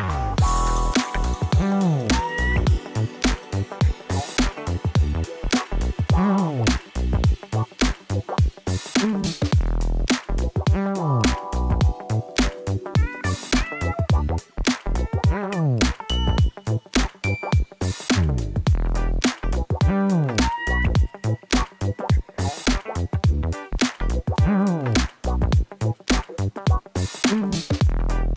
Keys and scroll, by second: 0.0-2.4 typing, 3.1 Return, 6.8 ctrl+shift+t, 17.7 Tab.